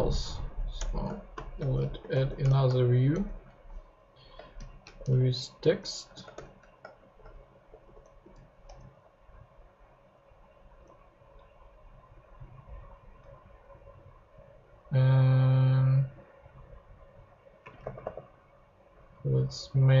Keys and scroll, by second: 0.5 Up, 0.7 Return, 1.1-3.0 typing, 3.1 shift+Return, 3.7 Return, 4.3-8.8 typing, 5.8 Return, 17.6-18.5 typing, 19.9-20.0 typing.